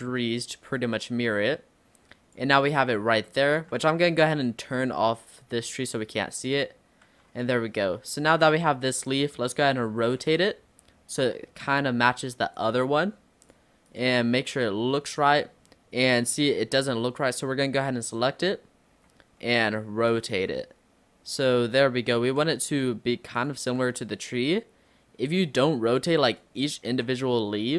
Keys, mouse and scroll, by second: 0.8 click, 3.0 scroll down 4, 3.3 middle click, 3.8 Tab, 4.2 click, 5.6 click, 6.5 click, 7.1 Tab, 8.4 click, 8.8-9.7 scroll up 7, 10.3 r, 12.0 g, 13.5 click, 13.9 click, 14.8 scroll up 1, 15.2 click, 15.5-16.4 scroll down 3, 16.7 l, 18.9 r, 20.4 g, 22.2 r, 23.7 g, 27.0 r.